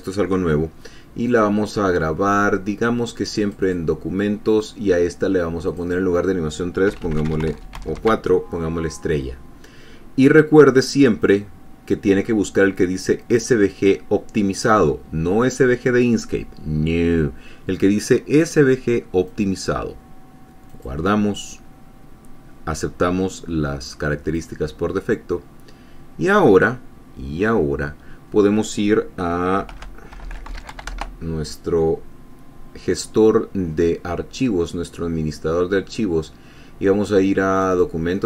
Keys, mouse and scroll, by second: 1.6 click, 3.7 click, 6.0 click, 7.0-8.8 typing, 11.6 click, 19.6 click, 21.0 click, 24.7 click, 30.1 alt+F2, 30.5 alt+t, 30.6 alt+h, 30.7 alt+u, 30.8 alt+n, 30.9 alt+a, 31.1 alt+r, 31.3 alt+Return, 37.9 click.